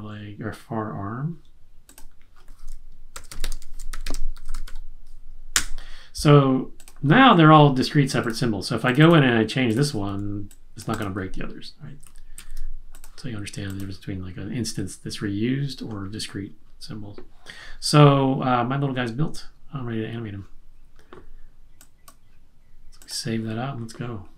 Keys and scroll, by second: 3.0-5.1 typing, 12.0 super+z.